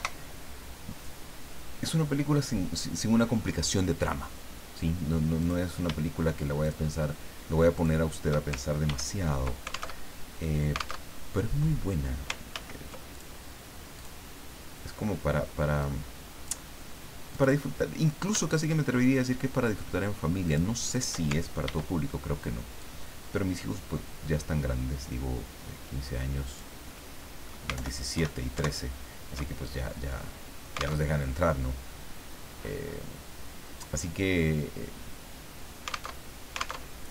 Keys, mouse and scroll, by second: 5.4 click, 6.6 shift+click, 7.8 shift+click, 8.9 ctrl+d, 10.0 ctrl+alt+Tab, 11.0 alt+Tab, 12.5 ctrl+z, 13.2 ctrl+click, 14.0 click, 15.8 click, 17.3 click, 18.5 shift+click, 20.4 shift+click, 21.6 ctrl+d, 22.8-26.8 ctrl+drag, 27.7 alt+Left, 28.5 alt+Right, 30.1 click, 31.0 alt+Tab, 36.1 alt+Tab, 36.8 alt+Tab.